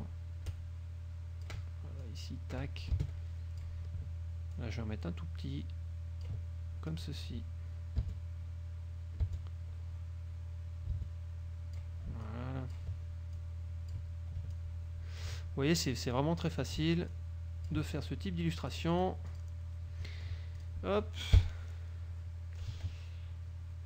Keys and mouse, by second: 0.1-1.7 ctrl+shift+drag, 2.1-3.9 ctrl+drag, 3.1 space, 4.7-6.5 ctrl+drag, 7.0-12.1 drag, 8.1 space, 9.3 space, 11.0 space, 12.3-13.1 ctrl+drag, 13.5-14.2 drag, 14.7-15.5 ctrl+drag, 16.3-16.9 drag, 17.3-18.0 ctrl+drag, 18.7 click, 20.1 middle click, 20.7 click, 21.5 KP_5.